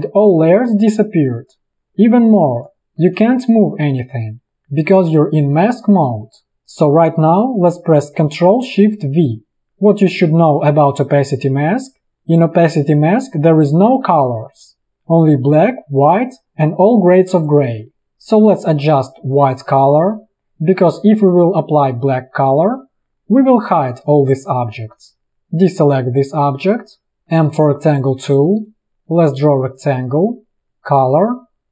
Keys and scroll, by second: 9.2 ctrl+shift+v, 27.1 space, 27.4 m.